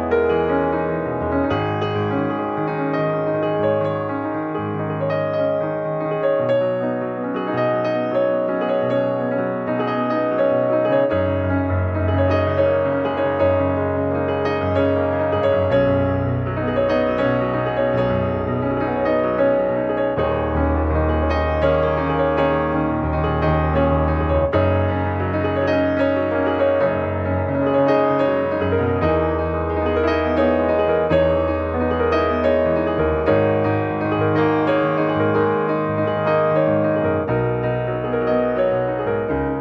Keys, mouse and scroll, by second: 0.7 click, 2.2 scroll down 2, 2.4 middle click, 3.2 click, 4.3 ctrl+`, 5.2 ctrl+click, 5.7 ctrl+Tab, 7.2-7.7 scroll up 1, 7.7 middle click, 8.5 scroll up 1, 8.8-10.8 shift+middle drag, 10.8 click, 12.4 click, 13.2-15.7 shift+middle drag, 15.7 click, 16.5-18.1 shift+middle drag, 18.1-26.9 drag, 28.4-30.1 drag, 30.1-30.6 scroll down 2, 32.4-33.7 drag, 34.1-36.3 scroll down 2, 36.3 click, 39.1-39.6 middle drag.